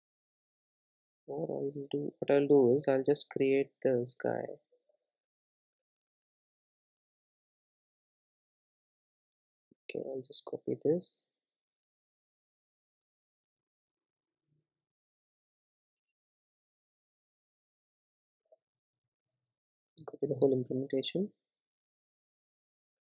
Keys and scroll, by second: 2.4 super+c, 4.4 super+e, 8.1 super+e, 8.1 super+z, 8.8 super+z, 9.3 super+e, 11.8 super+c, 14.0 super+e, 21.2 super+c, 22.3 super+c.